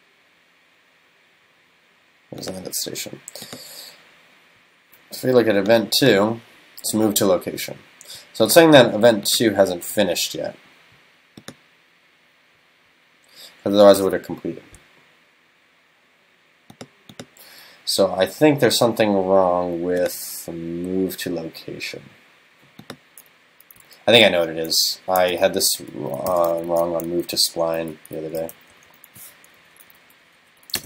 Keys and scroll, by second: 25.3 super+..